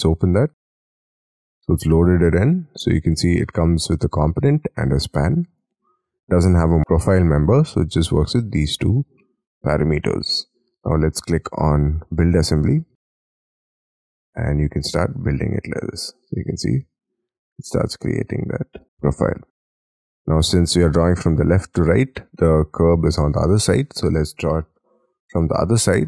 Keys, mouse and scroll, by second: 9.0-9.6 scroll down 9, 9.7-12.7 scroll up 11, 12.7-13.6 scroll down 6, 13.6 middle click, 14.0 scroll down 1, 14.1-16.1 scroll up 18, 16.1-17.5 scroll up 24, 18.9 scroll down 6, 20.6-21.0 scroll up 4, 21.7 scroll down 1, 23.2 middle click, 23.6-25.5 scroll down 27, 25.5 scroll, 25.8 Escape, 25.8 middle click.